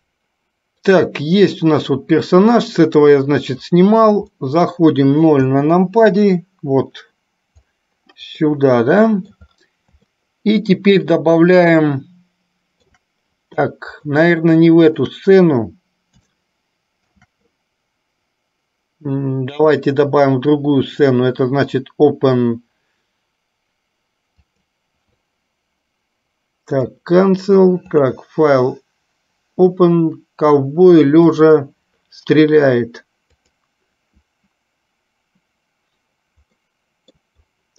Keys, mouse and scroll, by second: 4.6 middle click, 5.8 KP_0, 8.9 middle click, 10.5-13.3 shift+middle drag, 14.1-15.3 shift+middle drag, 16.5 shift+middle click, 19.9-27.0 drag, 28.0-35.6 drag, 36.8 middle click.